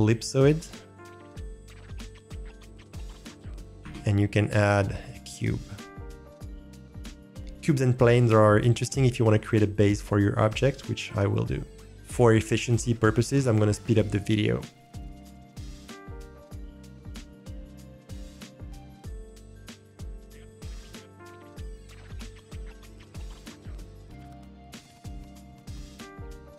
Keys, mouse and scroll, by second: 0.0-2.4 drag, 2.4-3.7 middle drag, 3.7 g, 3.7 shift+s, 3.8 shift+a, 5.9 drag, 6.2 click, 6.7 middle click, 14.9 Delete, 15.1 alt+click, 15.1 middle click, 15.3-22.3 typing, 16.2 click, 16.3 alt+middle click, 16.9 middle click, 17.1 middle click, 17.2 scroll down 2, 17.3 click, 17.9 alt+middle click, 18.9 middle drag, 19.2 middle click, 19.3 alt+click, 20.8 click, 21.3 middle click, 21.5 middle click, 21.8 alt+middle click, 22.0 middle click, 22.2 alt+middle click, 22.5 middle click, 22.5 scroll down 1, 22.9 ctrl+shift+drag, 23.5 click, 24.6 click, 25.2 middle click, 25.3 scroll up 2, 25.3 scroll down 2, 25.9 middle drag, 26.0 scroll down 2, 26.3 click.